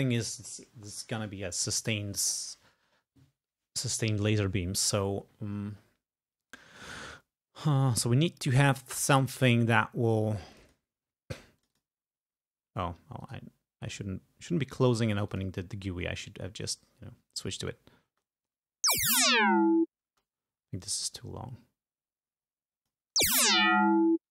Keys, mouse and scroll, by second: 10.6 click, 11.7 click, 13.3 click, 15.4 click, 18.2 space, 19.0 space, 20.2 space, 21.1-23.2 drag, 23.3 space.